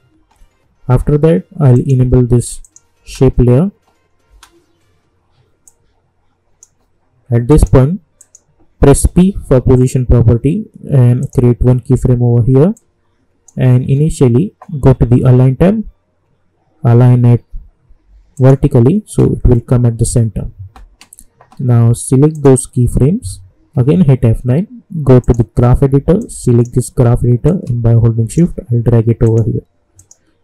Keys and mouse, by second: 3.0 space, 5.6-7.5 drag, 9.5 p, 11.2-15.0 drag, 18.3 click, 22.3 click, 23.7 F9, 25.2-29.2 drag.